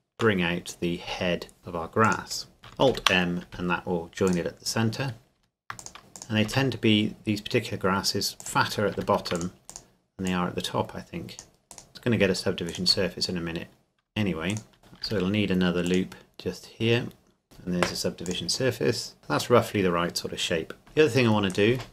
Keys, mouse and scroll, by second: 1.0 s, 2.0 click, 2.9 alt+m, 4.3 click, 5.4 ctrl+r, 5.8 click, 6.4 s, 8.4 click, 8.9 ctrl+r, 9.4 click, 11.7 right click, 11.9 click, 12.7 alt+right click, 13.3-14.1 scroll up 1, 14.5 alt+right click, 14.8 scroll down 1, 15.0 ctrl+r, 15.9 click, 17.4 ctrl+2, 18.3 click, 18.8-19.6 scroll down 1, 19.6 middle click, 20.8 Tab, 21.5 alt+right click.